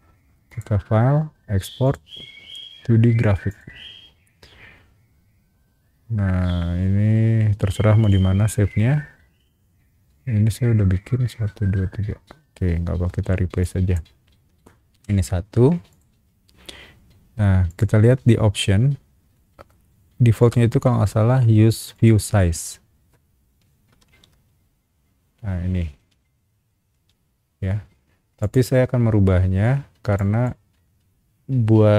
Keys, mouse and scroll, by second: 0.5 click, 1.8 click, 3.5 click, 8.0 click, 13.6 click, 14.9 1, 15.9 click, 17.7 click, 20.4 click, 21.9 click, 24.0 shift+q, 26.9 shift+w, 28.4 click, 30.1 click.